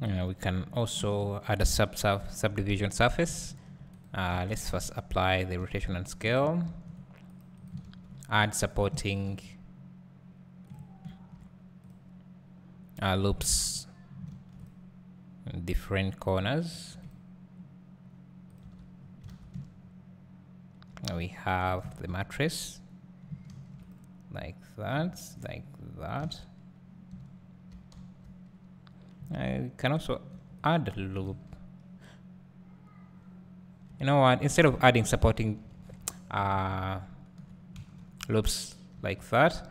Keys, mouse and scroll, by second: 2.5 Tab, 3.4 ctrl+r, 5.9 Tab, 6.6 ctrl+r, 7.7 right click, 7.8 ctrl+r, 8.7 right click, 9.0 ctrl+r, 10.7 click, 11.1 ctrl+r, 13.3 click, 13.5 ctrl+r, 13.8 click, 14.3 ctrl+r, 16.2 click, 16.7 ctrl+r, 18.9 Tab, 19.0-19.4 scroll down 1, 19.4 a, 19.6 `, 21.1-22.1 scroll up 1, 22.1 Tab, 23.5 ctrl+r, 25.1 ctrl+r, 26.1 click, 26.2 alt+a, 28.0 2, 30.0 ctrl+r, 31.2 ctrl+right click, 31.3 ctrl+z, 33.9 Tab, 34.9 ctrl+z, 35.9 ctrl+z, 36.4 ctrl+z, 39.0 2.